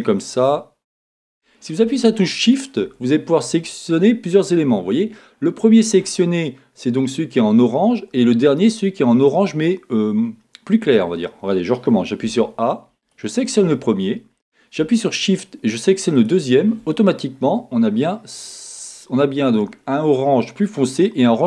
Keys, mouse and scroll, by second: 0.2 click, 2.4 shift+click, 12.2 a, 13.0 click, 16.1 shift+click.